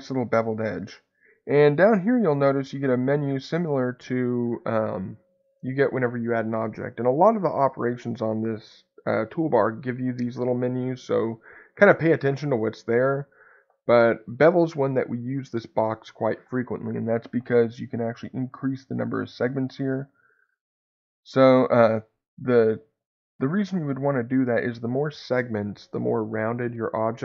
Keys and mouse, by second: 18.5 click, 19.2 click.